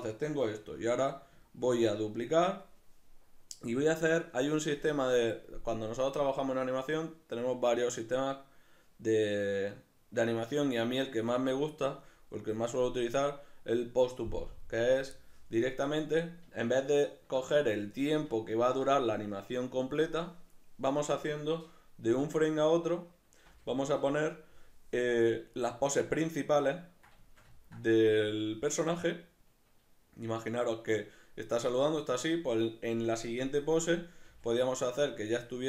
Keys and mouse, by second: 0.7 alt+q, 1.5 shift+middle click, 16.6 ctrl+middle click, 19.3-25.6 middle drag, 22.1 Right, 23.5 Left, 23.9 Right, 25.6 right click, 26.7-29.0 ctrl+middle drag, 29.0 right click, 34.3 g.